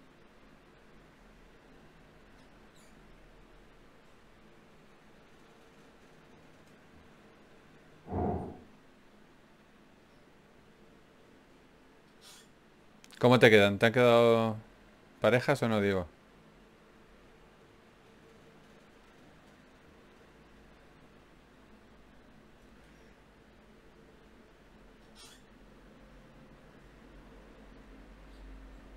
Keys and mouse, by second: 0.2 KP_Divide, 1.6 KP_Decimal, 5.8 ctrl+r, 8.4-12.5 drag, 12.1 f, 13.1 f, 15.1-17.7 typing, 18.7 Tab, 23.5 Tab, 24.7 ctrl+Tab, 25.3 click, 26.1 g, 28.6 KP_Divide.